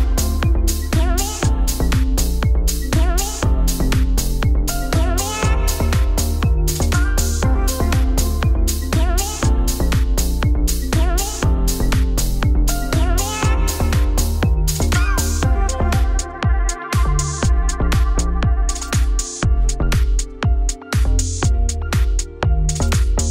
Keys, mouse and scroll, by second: 1.5 shift+middle click, 1.8 Tab, 1.9 click, 2.2 Tab, 2.2 2, 2.3 click, 3.2 shift+d, 3.6 p, 3.9 Tab, 4.3 click, 4.7 Tab, 4.8 1, 5.1 click, 5.3 middle click, 5.9 g, 6.7 a, 7.9 click, 8.6 middle click, 9.1 e, 10.2 middle click, 10.3 a, 10.5 scroll up 1, 10.7-11.3 scroll down 1, 11.3 middle click, 11.7 e, 14.8 3, 15.2 shift+d, 15.6 p, 15.9 Tab, 16.0 click, 16.6 Tab, 16.7 2, 16.9 click, 17.2 a, 17.4 middle click, 17.5 s, 19.3 middle click, 19.6 e, 22.7 3, 22.8 shift+click, 23.0 x.